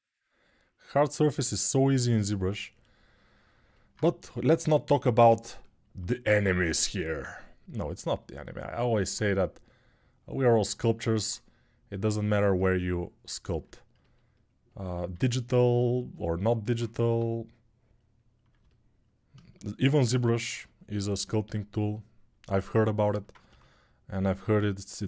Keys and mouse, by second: 3.9 g, 6.4-25.0 ctrl+alt+drag, 12.0 1, 14.9 alt+q, 16.8 g, 20.3 alt+q, 23.2 g.